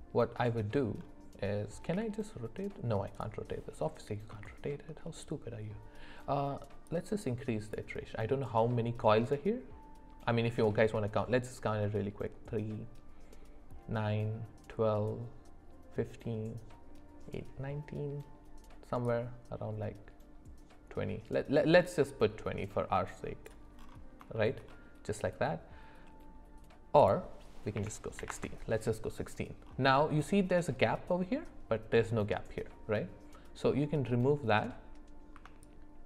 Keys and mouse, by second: 1.9 r, 4.4 shift+middle click, 6.9 click, 19.1-23.5 drag, 24.4 shift+middle click, 27.0-28.3 drag, 35.6-36.0 ctrl+shift+drag.